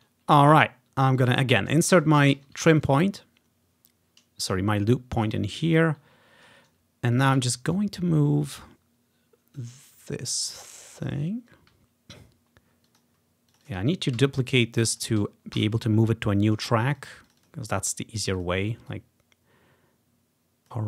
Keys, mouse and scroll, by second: 1.1 scroll down 1, 1.2-4.0 drag, 2.4 ctrl+i, 5.5-6.3 ctrl+scroll down 3, 7.2 ctrl+click, 7.6-8.7 scroll down 1, 9.6-12.9 drag, 13.1 click, 13.7 click, 13.8 click, 14.2 ctrl+d, 14.6 click, 14.9 click, 15.0 click, 15.6 Delete, 16.0 scroll down 2, 16.9 click, 18.4 click, 19.0-20.8 drag, 19.8 typing.